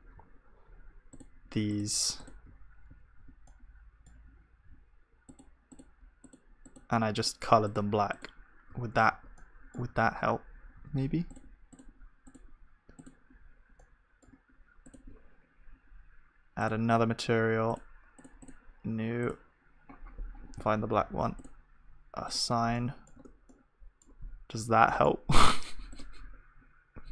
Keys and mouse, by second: 2.9-4.2 drag, 2.9-6.4 middle drag, 2.9 right click, 3.0 ctrl+z, 6.4-21.4 drag, 9.1 ctrl+z, 9.4-21.4 middle drag, 9.4-21.4 right drag, 22.8-24.6 drag, 22.8 middle click, 22.8-24.6 right drag, 23.2 Tab, 24.6 ctrl+s, 25.3 KP_1, 26.6-27.1 drag, 26.6-27.1 right drag.